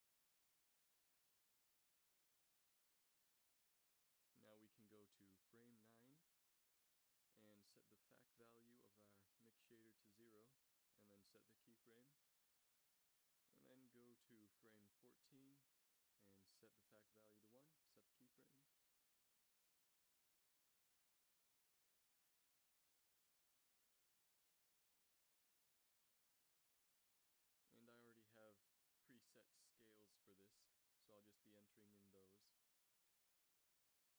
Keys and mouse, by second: 4.4-6.0 Left, 6.6 Right, 6.8 Right, 12.1 i, 14.0 Right, 14.2 Right, 14.4 Right, 14.9 Right, 15.6 Right, 18.2 i, 25.9-28.9 drag, 29.1-34.1 drag.